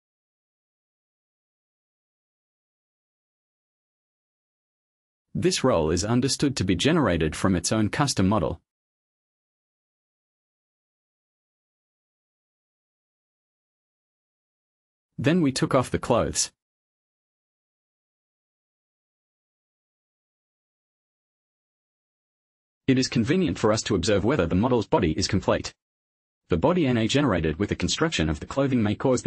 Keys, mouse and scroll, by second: 19.9 click, 21.9-22.6 scroll down 1, 23.3 scroll down 1, 24.0 click, 26.3 click.